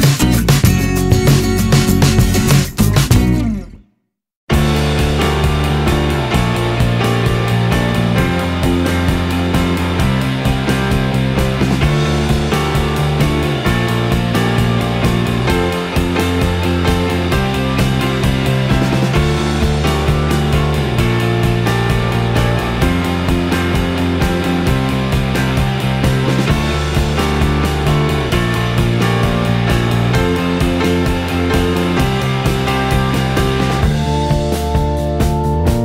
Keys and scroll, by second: 13.6 r, 26.9 ctrl+s.